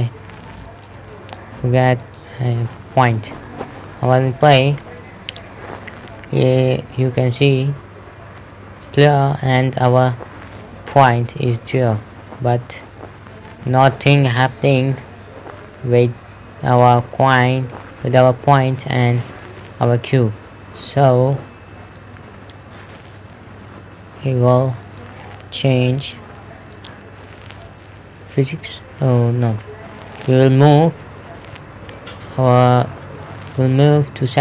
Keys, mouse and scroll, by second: 1.1 click, 3.9 p, 5.1 click, 5.5-12.5 typing, 13.6-17.5 typing, 18.5 typing, 19.2 Escape, 25.3 click, 26.3 scroll up 1, 30.8 click.